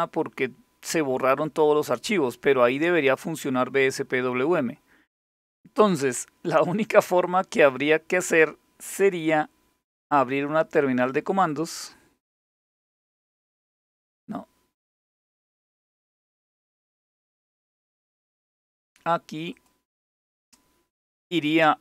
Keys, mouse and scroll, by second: 11.1 click, 16.0 click, 17.3 click, 19.1 click.